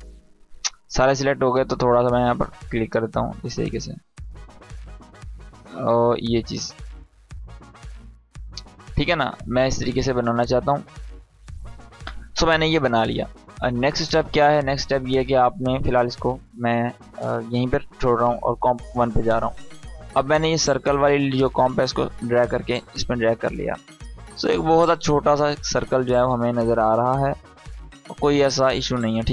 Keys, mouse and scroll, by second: 9.9 space, 12.3 space, 15.9-22.1 drag.